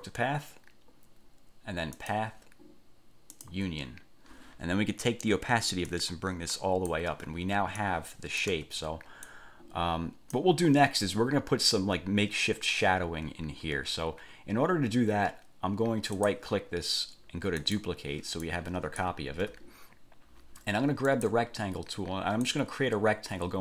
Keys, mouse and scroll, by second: 2.1 click, 3.5 click, 6.1 click, 7.9-8.8 drag, 8.7 1, 9.5 click, 16.3 click, 17.7 click, 18.6-19.3 drag, 19.5 ctrl+z, 21.3 click, 22.6-23.6 drag.